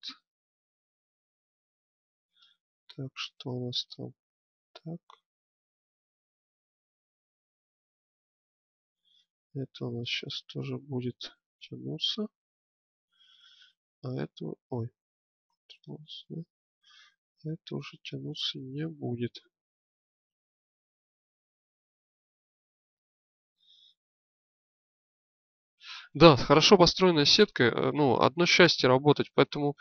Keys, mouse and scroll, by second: 0.3-2.1 drag, 7.4-9.8 drag, 9.8-11.1 middle drag, 15.9 ctrl+z, 16.6-18.3 drag, 20.2 click, 24.4 click, 25.7 click.